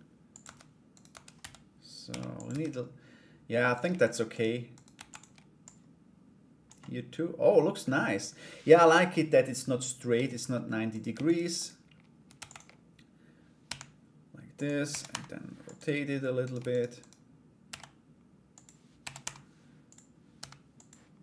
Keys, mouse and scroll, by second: 0.0 Tab, 0.5 right click, 1.0 Tab, 1.0 a, 1.6 g, 2.1 Tab, 3.3 right click, 3.6 shift+right click, 3.9 shift+right click, 4.3 shift+right click, 4.5 shift+d, 5.2-6.2 drag, 6.4 middle click, 7.1 scroll down 1, 7.4 middle click, 10.5 right click, 10.8 shift+right click, 11.1 shift+right click, 11.9 shift+d, 13.2 g, 14.4 r, 16.0 right click, 16.3 shift+right click, 16.5 shift+right click, 17.2 shift+d, 18.6 r, 19.9 g.